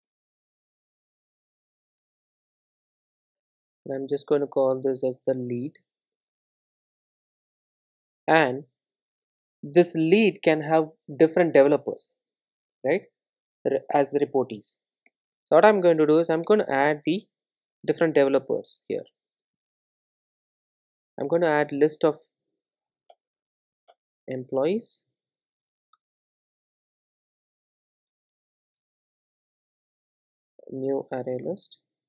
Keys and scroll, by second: 0.0 super+e, 3.7 super+v, 15.8 Return, 21.5 Return, 23.5 alt+Return, 27.6 Return.